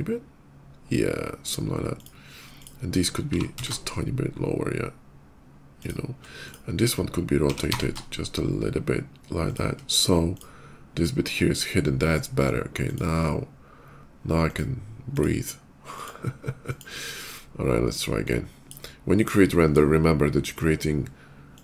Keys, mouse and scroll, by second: 1.7 shift+click, 2.4 click, 3.2 g, 3.4 z, 3.5 g, 3.6 g, 5.6 shift+click, 6.2 shift+click, 7.1 r, 7.5 x, 9.3 click, 10.2 shift+click, 12.6 click, 14.3 click, 14.8 click, 15.6 click, 16.3 click, 17.9 click, 19.0 click, 21.2-21.6 drag.